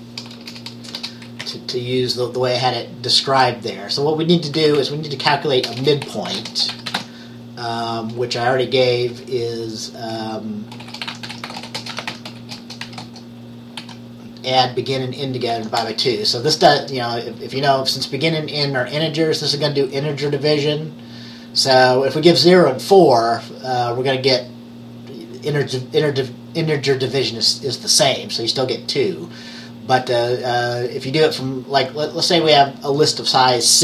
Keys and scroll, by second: 0.3 BackSpace, 0.4 BackSpace, 0.6 BackSpace, 1.1 BackSpace, 1.5 Up, 4.4-9.0 typing, 10.2-13.9 typing, 15.6 typing, 15.9 Return.